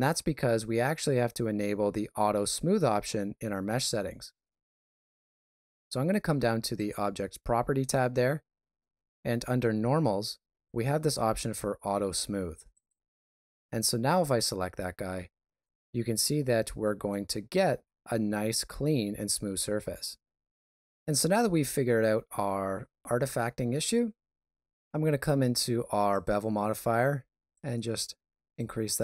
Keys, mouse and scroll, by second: 6.7 click, 12.7 click, 15.6 middle click, 16.6 shift+middle click, 17.3 ctrl+middle click.